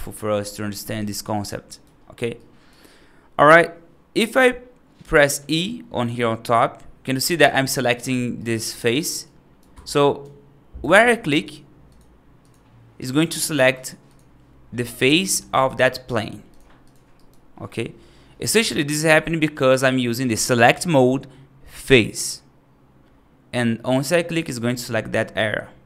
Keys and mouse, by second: 0.8 right click, 1.5 right click, 2.2 right click, 6.0 e, 8.2 right click, 8.5 ctrl+z, 9.1 right click, 9.6 g, 10.7 click, 13.0 click, 14.0-17.0 drag, 17.0 right click, 17.5 middle click.